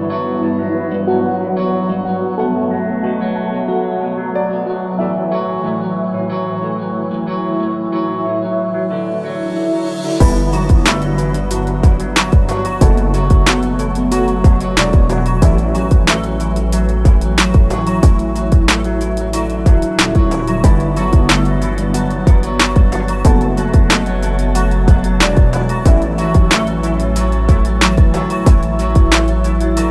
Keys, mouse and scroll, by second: 17.3 click, 19.1 alt+click, 23.2 click, 24.0 scroll up 1, 25.0 click, 27.9 alt+scroll down 2.